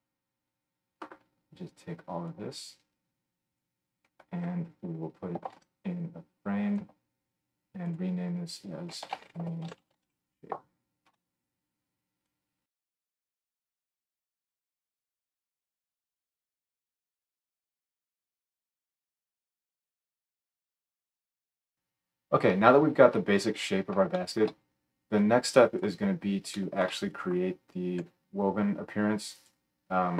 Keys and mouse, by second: 5.5 ctrl+j, 12.3-15.8 right drag, 19.6 click, 19.6 middle click, 19.6 right click, 20.4-29.5 drag, 28.0 g, 29.5-30.1 middle drag.